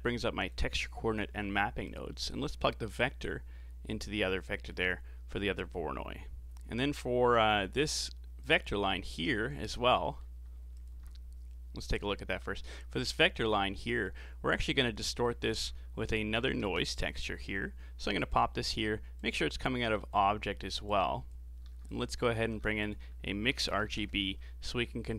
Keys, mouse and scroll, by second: 1.2 g, 3.0 click, 4.4-7.6 middle drag, 7.6 scroll up 3, 8.4 click, 9.0 middle click, 9.7-10.0 scroll down 4, 10.0 middle click, 10.8 ctrl+shift+click, 12.4-13.9 middle drag, 13.9 click, 15.3 shift+a, 19.2 click, 20.9 click, 21.9 click, 22.4 shift+a.